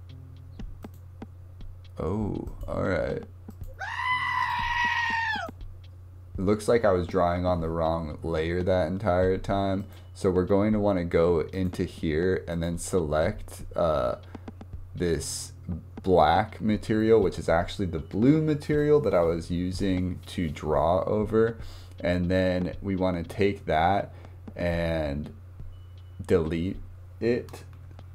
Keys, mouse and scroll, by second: 0.8 click, 2.5-3.7 drag, 4.6 click, 5.4 click, 9.8 click, 11.5 click, 12.5 click, 27.8 Delete.